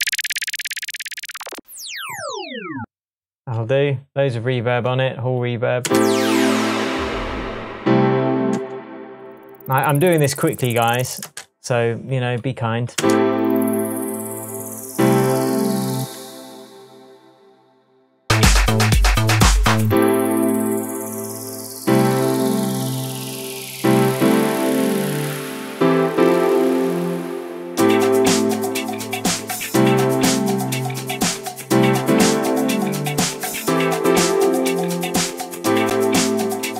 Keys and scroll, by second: 5.8 space, 8.5 space, 11.2 space, 12.9 space, 16.0 space.